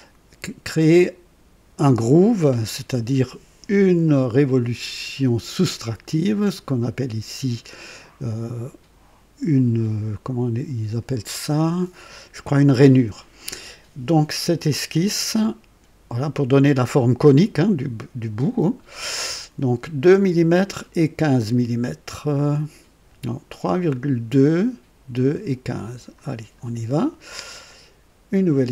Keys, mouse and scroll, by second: 25.8 click.